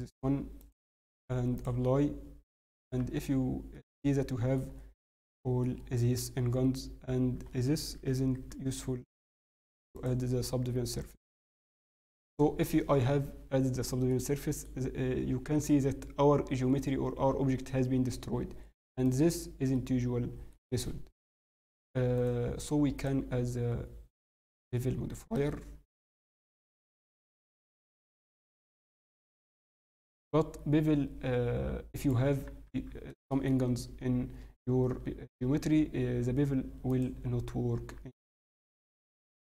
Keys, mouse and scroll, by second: 2.8 Tab, 3.0 scroll, 3.7 middle click, 3.7 scroll up 5, 5.6 middle click, 6.5 scroll, 7.2 scroll down 1, 7.4 scroll down 7, 9.1 Tab, 9.9 click, 14.0 middle click, 19.0 click, 19.7 middle click, 20.6-21.2 scroll, 21.2 scroll down 1, 21.4 scroll down 4, 22.1 click, 23.4 scroll, 24.7 middle click, 24.7 scroll up 3, 28.1 click, 32.4 scroll, 32.6 Tab, 32.6 scroll up 4, 32.9 scroll, 33.3 shift+middle click, 33.3 scroll down 4, 33.5 scroll, 35.0 scroll, 35.1 scroll, 35.3 scroll down 1, 36.8 click, 37.7 Tab, 38.1 Tab, 38.5 Tab, 38.9-39.3 scroll down 3, 39.3 middle click.